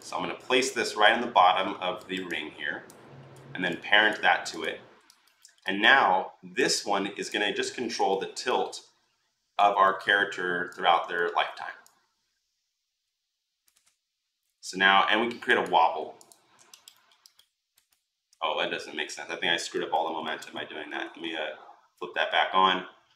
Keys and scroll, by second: 7.5 r, 20.8 ctrl+z.